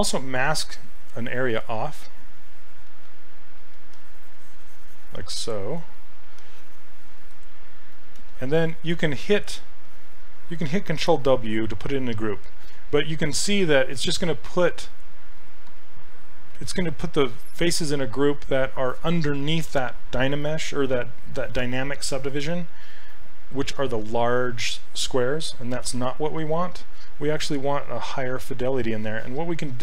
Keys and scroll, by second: 11.0 ctrl+w, 25.9 ctrl+z.